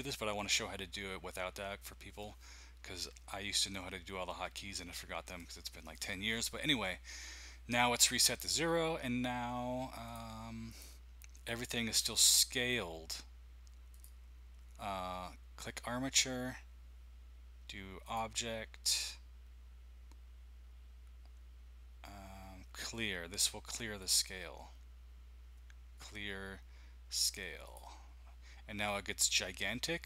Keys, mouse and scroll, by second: 10.0 click, 10.7 click, 13.9-18.9 drag, 24.0-26.4 drag, 27.6 click, 28.8-30.0 scroll down 6.